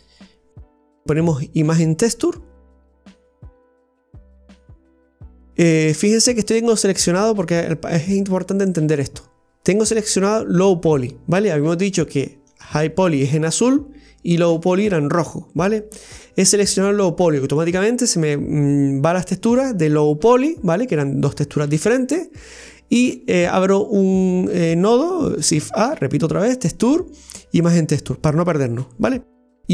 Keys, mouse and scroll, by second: 5.8 scroll down 1, 12.6 click, 14.5 click.